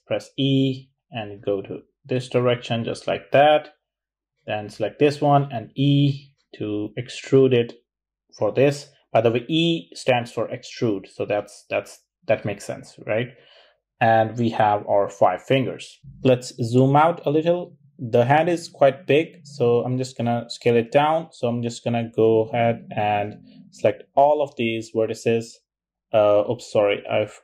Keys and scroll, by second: 4.2 e, 10.2 typing, 17.5 typing, 26.2 super+a.